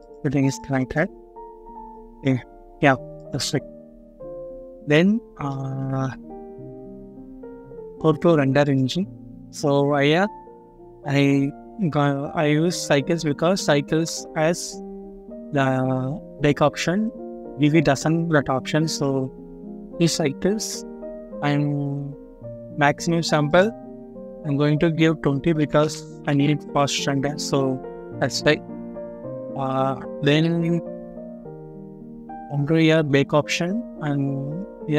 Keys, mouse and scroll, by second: 2.4-2.8 scroll down 1, 4.1-4.7 scroll up 1, 5.4 middle click, 14.6 scroll down 1, 16.7 scroll up 1, 20.5 scroll down 1, 21.4-21.7 scroll up 1, 25.5 typing, 26.1 Return, 28.9-29.9 scroll up 1, 30.0 scroll down 1, 31.2 scroll down 1, 31.7 scroll up 1.